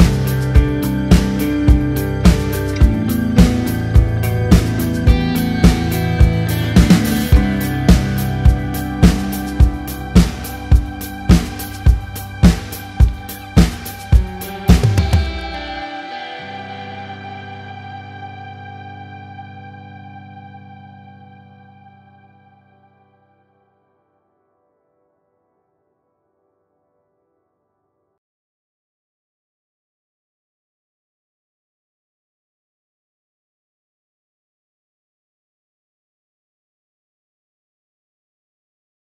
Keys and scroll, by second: 0.2 ctrl+z, 19.1 f, 21.3 d, 24.2 ctrl+z, 24.7 ctrl+a, 26.3 ctrl+a, 33.7 f.